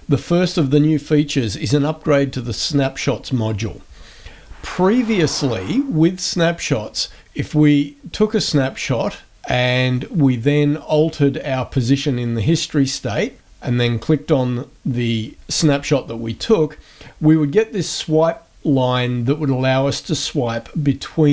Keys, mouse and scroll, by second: 7.2 click, 8.0 click, 10.0 click, 11.0 click, 12.8 click, 13.8 click, 17.6-21.3 drag.